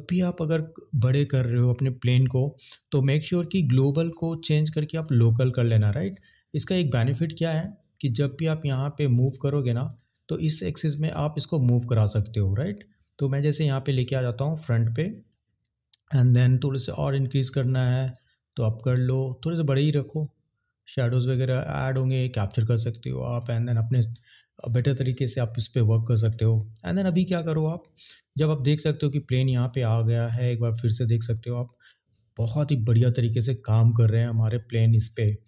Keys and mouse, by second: 3.8-5.2 drag, 9.8 click, 17.0-19.0 drag, 20.3 click, 20.8 click, 27.0 click, 29.4 click, 30.2 click.